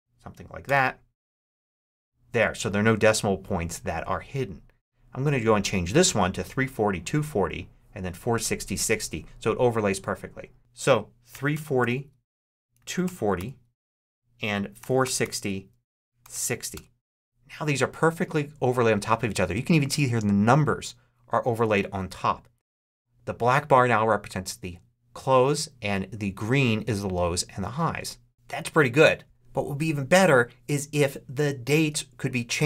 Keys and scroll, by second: 0.0-0.2 typing, 0.5 Return, 11.0-16.7 typing.